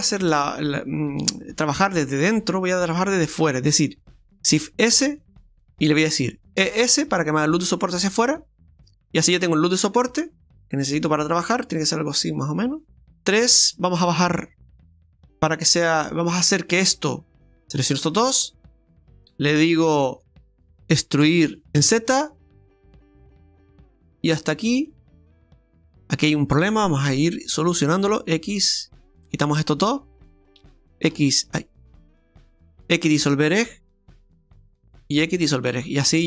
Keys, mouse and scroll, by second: 1.1 right click, 2.3 alt+shift+right click, 4.5 shift+s, 6.6 e, 13.1 scroll down 2, 13.1 KP_3, 13.7-14.2 scroll down 4, 14.2 shift+middle click, 17.4 right click, 17.9 shift+right click, 18.5-18.8 scroll down 2, 19.4-19.8 scroll down 2, 19.8 shift+middle click, 21.2 e, 25.4-26.7 scroll up 6, 27.1 click, 27.9 right click, 28.9 ctrl+right click, 31.0 right click, 31.1 z, 33.4 x, 35.1 right click, 35.4 right click, 35.4 x.